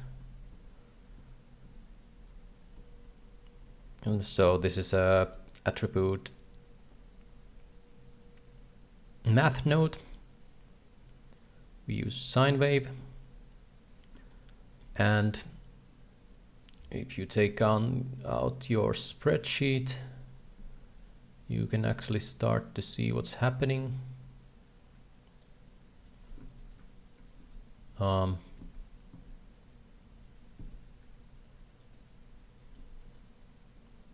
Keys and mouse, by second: 0.5 ctrl+c, 1.2 ctrl+v, 2.0 ctrl+v, 3.0 ctrl+v, 4.4 g, 5.1 shift+a, 10.4-12.1 drag, 12.6 shift+middle click, 13.3 g, 14.3 shift+middle click, 16.8-17.9 right drag, 18.8-20.3 right drag, 22.6-23.4 drag, 25.0 click, 25.6 click, 26.6 ctrl+shift+click, 29.6 Tab, 30.2 click, 31.3 Tab, 31.8 click, 32.6 right click, 33.0 g.